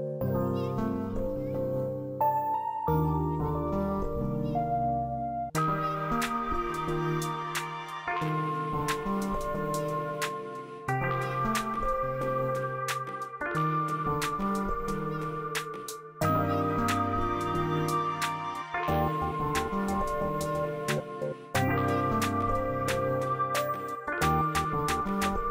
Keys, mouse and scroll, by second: 6.2 click, 7.9 ctrl+z, 9.1 click, 9.9 ctrl+z, 11.0 click, 12.9 ctrl+click, 13.2 space, 14.8-16.3 drag, 16.3 space, 17.9 click, 23.3 click, 23.6 space.